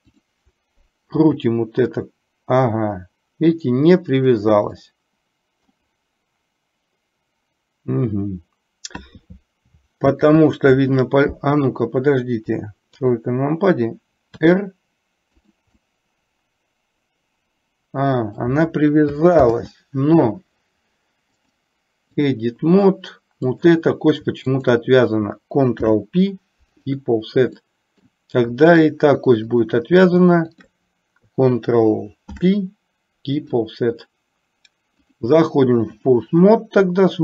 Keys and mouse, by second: 0.1 click, 1.3 r, 4.9 middle click, 10.2 ctrl+z, 13.1 KP_3, 14.5 r, 15.9-18.8 middle drag, 19.5 ctrl+z, 21.5 click, 24.6 shift+click, 25.9 ctrl+p, 27.8 middle click, 28.8 middle click, 29.5 click, 30.5 shift+click, 32.4 ctrl+p, 35.1-36.2 drag, 36.9 KP_3.